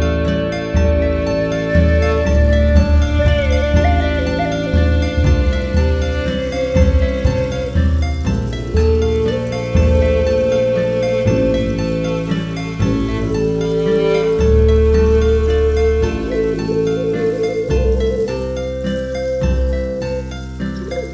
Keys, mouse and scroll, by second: 0.6 click, 0.9-2.1 right drag, 2.1 m, 2.6 right click, 5.8 click, 6.0-6.8 scroll down 4, 6.8 drag, 7.0-7.6 scroll down 1, 7.6 click, 10.7 click, 11.1-11.6 scroll down 12, 11.6-12.0 shift+middle drag, 12.0 ctrl+s, 13.0 click, 13.9 click, 14.2 KP_Decimal, 14.5-15.0 middle drag, 15.0-15.5 scroll up 1, 15.5 click, 15.8 click, 16.2-17.5 drag, 18.7 click, 19.8 ctrl+s, 20.3-21.1 drag.